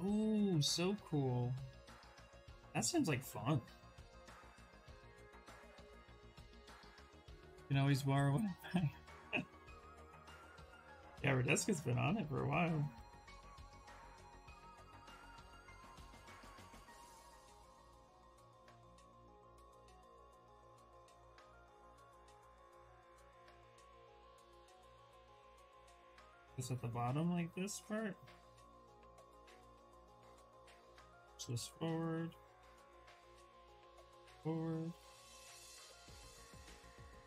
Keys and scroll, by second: 2.8 s, 8.8 w, 16.1 s, 21.3 w, 28.8 q, 29.5 s, 29.8 w, 31.1 q, 32.8 w, 33.9 q, 37.1 w.